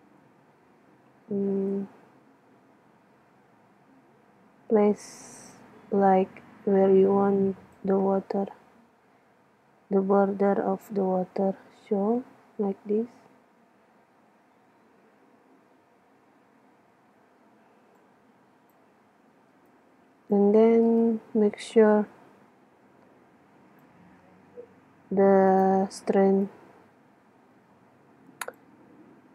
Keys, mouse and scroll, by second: 0.3 KP_1, 1.7-3.4 drag, 8.3-13.5 middle drag, 12.4 KP_3, 16.0 KP_6, 18.0-18.6 drag, 19.1 z, 19.6-20.0 drag, 21.3-21.6 drag, 21.9 middle drag, 22.0-28.2 drag, 22.0-22.6 right drag.